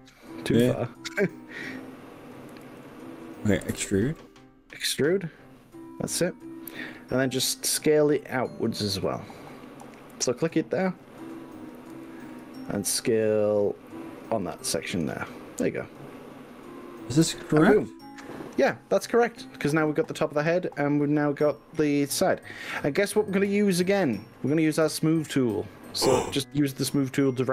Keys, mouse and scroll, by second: 0.5 g, 2.4 click, 2.7 ctrl+z, 3.7 e, 10.9 click, 11.9 s, 12.5 y, 15.3 click, 15.6-26.1 middle drag, 26.3-27.5 middle drag.